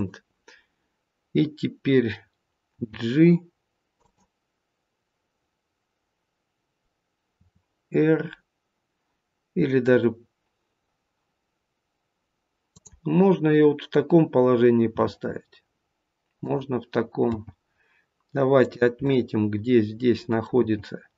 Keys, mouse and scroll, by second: 2.8 g, 7.3 r, 14.8 r, 17.3 g, 19.0 middle click, 20.5 g.